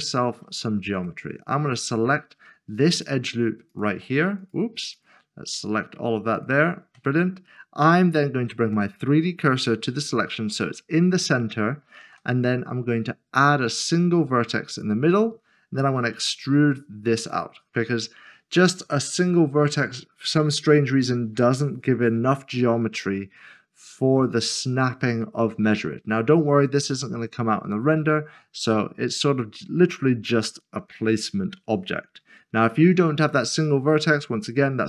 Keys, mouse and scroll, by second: 0.9 click, 1.4 alt+click, 2.9 alt+shift+click, 3.8 alt+shift+click, 4.9 alt+click, 6.4 alt+shift+click, 8.5 s, 11.2 click, 14.7 a, 16.2 e.